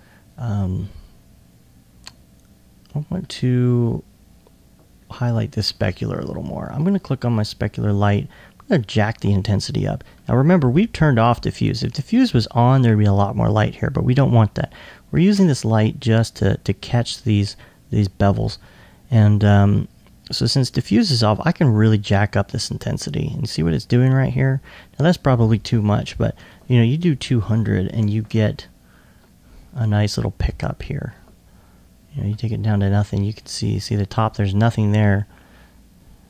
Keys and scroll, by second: 26.6 Tab.